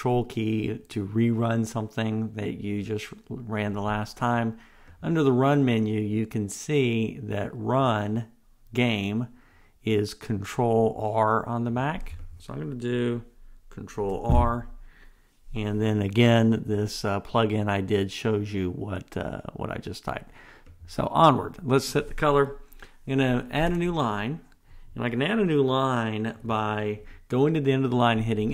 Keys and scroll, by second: 14.0 ctrl+r, 26.7 super+z.